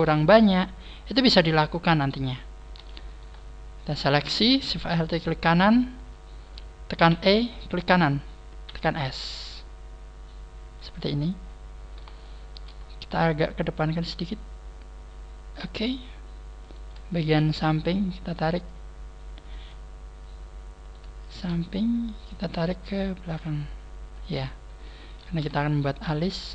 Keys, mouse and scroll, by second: 1.9 scroll up 1, 2.4-3.0 scroll down 1, 3.0 alt+shift+right click, 7.1 e, 8.6 s, 11.3 click, 11.4-12.1 scroll up 5, 12.1 shift+middle click, 13.1 scroll up 1, 13.5 click, 16.6 right click, 17.1 shift+right click, 17.8 scroll up 1, 18.5 scroll up 1, 18.6 click, 20.8 right click, 21.2 shift+right click, 21.6 middle click, 23.3 click, 24.9 a, 25.7 alt+shift+right click.